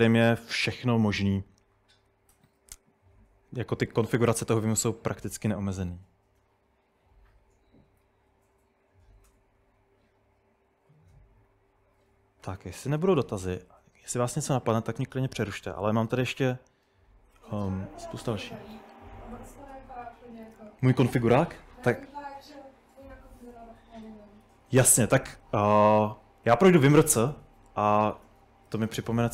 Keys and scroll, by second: 24.6-25.8 typing, 26.8 ctrl+n, 27.4 ctrl+super+Right, 27.6-29.3 typing.